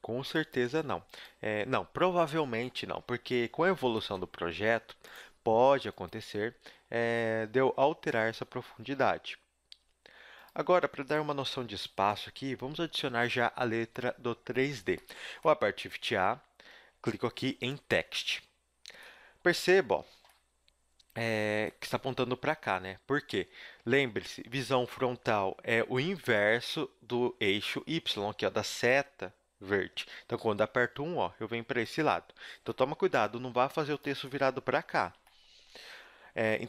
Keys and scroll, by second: 0.5 g, 3.5 z, 3.8 a, 4.5 ctrl+Tab, 8.3 g, 11.6 Tab, 16.2 shift+a, 30.7 KP_1, 33.0 r, 35.1 ctrl+z.